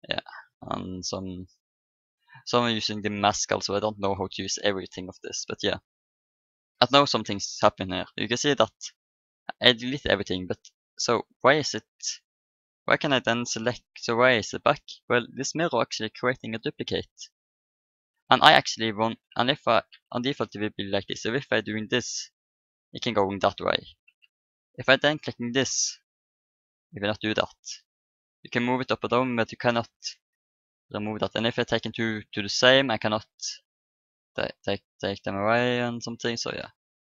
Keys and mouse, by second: 2.4-4.0 drag, 4.8-6.6 drag, 5.8 middle click, 7.2 KP_7, 11.2-12.9 right drag, 13.8-15.6 right drag, 17.5-19.2 right drag, 19.5-23.5 drag, 20.7 right click, 21.6 right click, 24.0 ctrl+z, 25.6 click, 28.9 ctrl+z, 30.1 ctrl+z, 30.9-36.8 drag, 35.8 ctrl+z, 36.1 ctrl+z, 36.7 ctrl+z.